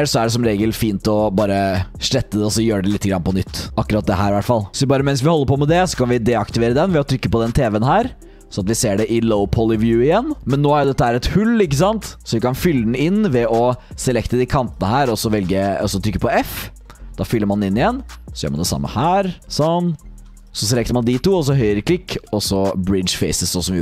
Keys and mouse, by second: 0.4 shift+click, 0.7 click, 1.9 typing, 2.3 click, 3.3 click, 3.7 2, 3.9 click, 4.2 click, 4.7 3, 7.7 click, 8.3 middle click, 9.2-10.3 middle drag, 12.5 shift+click, 13.0 click, 13.9 click, 16.2 f, 16.5 click, 17.5 click, 19.0 f, 19.3 click, 20.1 3, 20.5 ctrl+e, 20.5 click, 22.2 ctrl+z, 22.2 click.